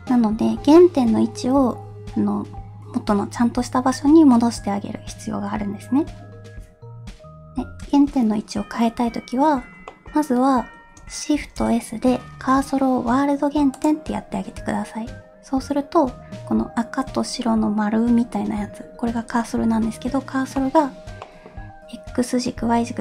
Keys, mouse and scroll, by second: 10.0 middle click, 11.4 shift+s, 20.6 middle click, 21.3 middle click.